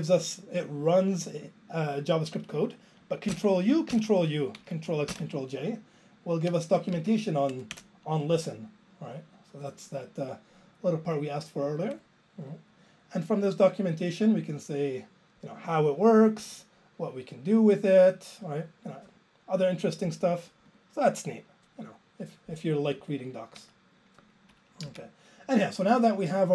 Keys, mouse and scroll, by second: 3.3 ctrl+u, 4.0 ctrl+u, 23.6 q, 24.8 Down.